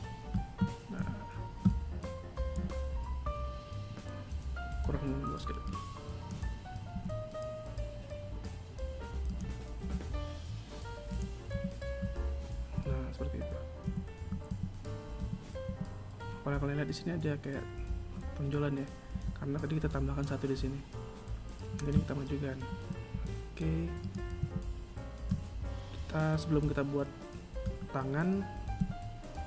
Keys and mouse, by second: 0.5 KP_1, 2.1 z, 4.4 b, 5.2-6.5 drag, 6.5 e, 9.4 s, 11.1 z, 12.3 KP_1, 13.4 a, 14.0 Tab, 14.8 Tab, 15.2 Tab, 18.7 Tab, 22.2 Tab, 22.6 KP_1, 23.5 right click, 23.9 Tab, 28.3 KP_1.